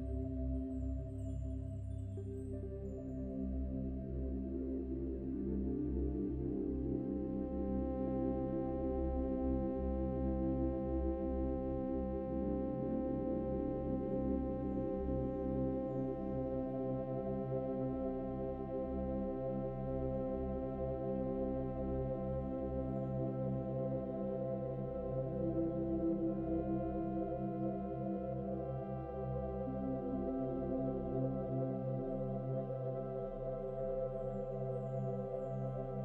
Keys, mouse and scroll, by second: 2.1-3.2 scroll down 5, 10.1 ctrl+s, 11.7 scroll up 3, 11.7 scroll down 2, 11.9-13.5 middle drag, 13.5 scroll up 2, 14.2 shift+right click, 14.9 shift+a, 17.5 KP_1, 19.1-19.6 scroll up 5, 19.6-21.3 shift+middle drag, 21.3 s, 23.7-24.0 scroll down 4, 24.4 s, 27.3 click, 29.2 s, 31.0 click, 35.0 KP_7, 35.9-36.0 shift+middle drag.